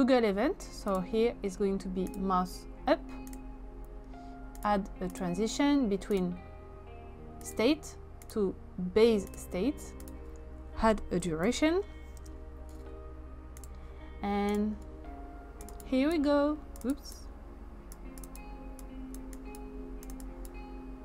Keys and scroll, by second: 10.7-11.9 typing, 12.2 Return.